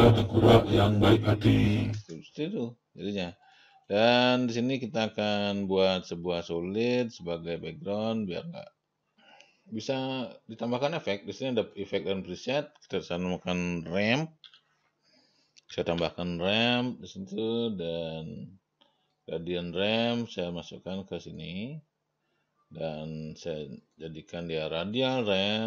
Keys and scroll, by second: 2.4 0, 14.6-16.4 typing.